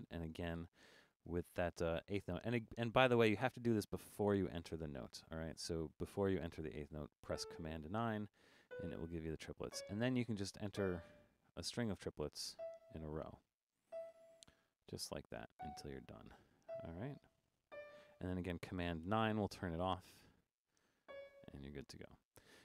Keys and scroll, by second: 19.1 super+9, 20.1 5.